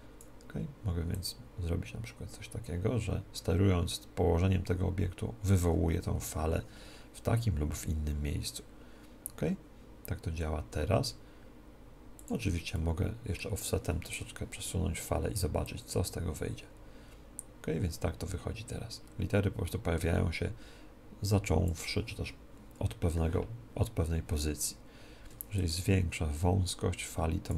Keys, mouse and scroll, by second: 6.5 g, 12.6-14.3 drag, 12.8-14.6 middle drag, 14.3-16.0 right drag, 15.8-17.7 drag, 25.8-27.5 drag.